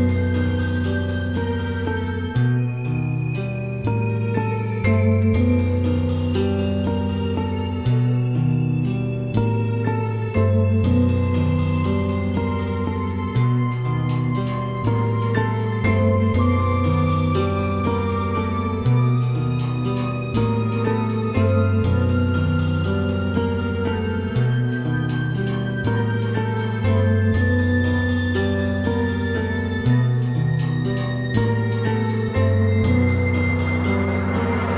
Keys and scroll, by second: 32.3 ctrl+alt+z.